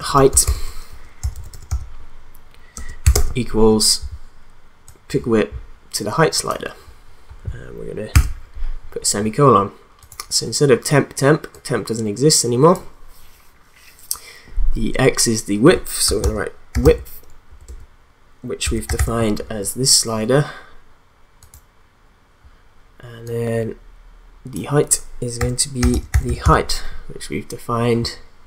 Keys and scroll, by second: 0.0-3.1 typing, 8.1 ;, 16.0-19.5 typing, 25.1-26.9 typing.